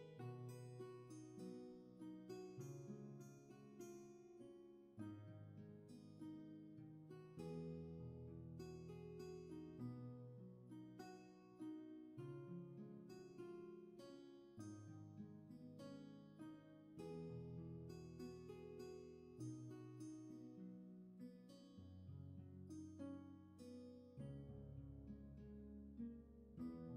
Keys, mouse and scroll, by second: 7.7 ctrl+z, 10.3 ctrl+z, 15.2 scroll down 1, 16.5 scroll up 1, 21.8 ctrl+z, 24.7 ctrl+z.